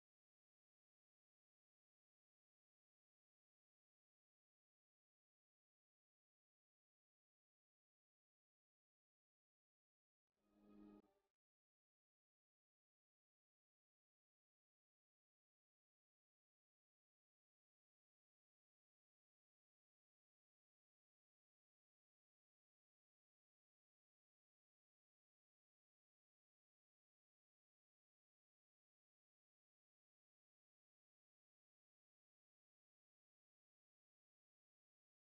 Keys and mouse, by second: 3.4-7.5 drag, 11.3-18.0 drag, 11.3-12.3 right drag, 16.2-18.0 right drag, 19.4-21.2 drag, 19.4-20.9 right drag, 21.0 Tab, 23.6 Tab, 27.0 right click, 27.3 s, 31.3 Tab, 33.1 Tab.